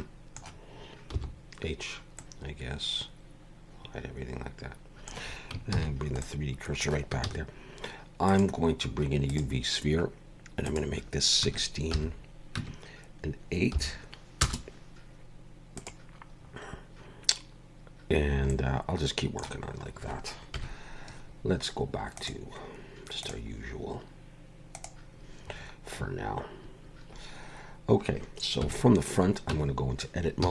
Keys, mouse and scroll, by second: 1.1 h, 2.2 middle click, 5.7 shift+c, 6.2 middle click, 7.2 shift+a, 10.7 click, 15.7 click, 16.3 scroll down 4, 18.5 middle click, 19.7 scroll up 1, 20.5 KP_1, 22.2 click, 25.5-27.3 scroll up 3, 28.6 KP_1, 29.5 Tab, 30.4 z.